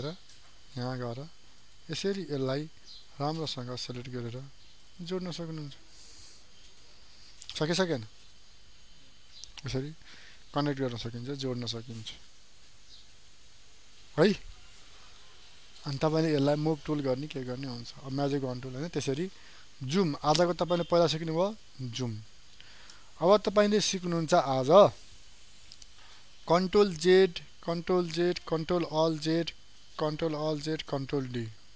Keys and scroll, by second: 21.0 ctrl+space, 24.8 ctrl+0, 28.4 ctrl+alt+z, 30.7 ctrl+z.